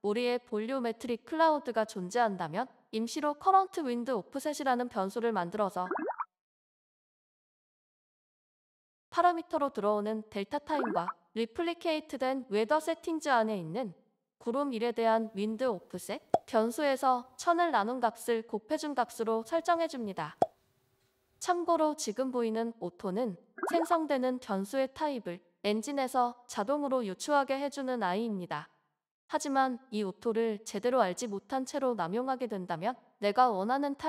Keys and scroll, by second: 10.7-11.7 typing, 16.0-16.4 typing, 19.8 *, 20.6 g, 23.7-24.7 typing.